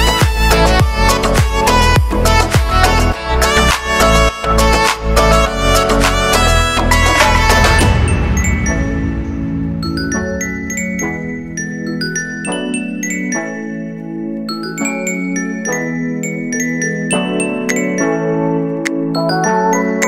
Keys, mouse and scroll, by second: 0.0 ctrl+space, 0.2 click, 0.6 x, 0.7-3.1 drag, 3.1-4.4 middle drag, 3.9-4.4 scroll up 2, 4.4 x, 4.5-6.4 drag, 6.4 x, 6.5 click, 7.2 x, 7.3-8.7 drag, 8.7 x, 8.7-12.4 drag, 12.4 shift+middle click, 13.1 scroll up 1, 13.2 x, 13.3 click, 13.9 middle click, 14.4 click, 15.2-16.2 shift+middle drag, 15.4 scroll down 2, 15.7-16.2 scroll up 1, 16.2-17.2 drag, 17.2-18.2 shift+middle drag, 17.7 scroll up 2, 18.2 click, 18.6 middle click, 18.8-20.0 drag, 20.0 middle click.